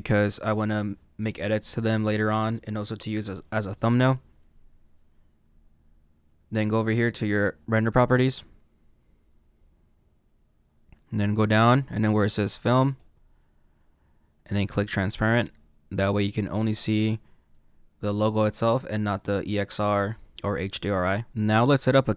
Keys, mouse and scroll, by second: 17.5 middle click, 20.3-21.3 middle drag, 21.3 click.